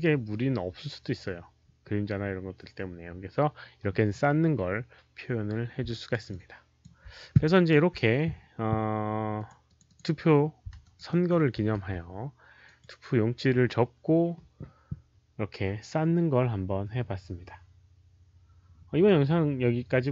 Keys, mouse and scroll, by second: 5.8 alt+right click, 6.2 alt+click, 7.4 alt+right click, 9.2 alt+right click, 9.3 alt+click, 9.6 alt+click, 9.8 click, 10.7 alt+right click, 11.0 alt+middle click, 11.7 q, 12.6 alt+click, 12.6 alt+right click, 16.6 alt+right click, 16.9 alt+click.